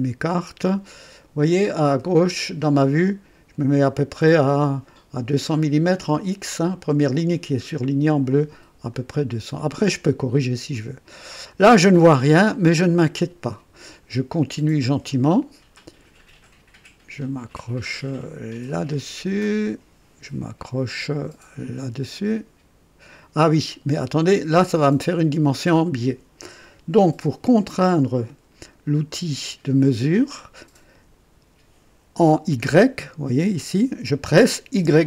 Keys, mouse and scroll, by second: 8.9 click, 15.0 click, 18.6 click, 34.7 y.